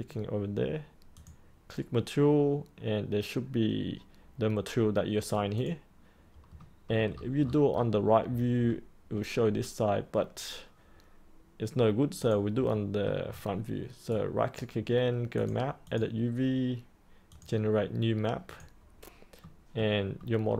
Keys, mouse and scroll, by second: 7.0-12.2 scroll up 1, 12.2 click, 12.7 middle click, 13.2 scroll up 1, 14.1 right click, 15.3 click, 19.1 scroll up 1, 19.3 middle click.